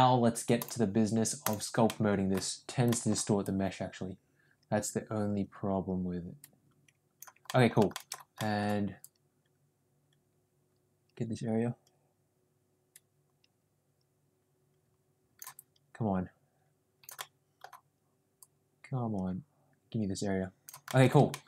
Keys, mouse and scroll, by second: 0.7 click, 1.8 middle click, 2.7 ctrl+z, 2.8 middle click, 3.3-7.2 drag, 7.4 middle click, 7.8 shift+middle click, 8.3 middle click, 8.9-15.4 drag, 15.5-17.0 drag, 17.1 middle click, 18.3-20.6 drag, 20.8 middle click, 21.2 shift+middle click.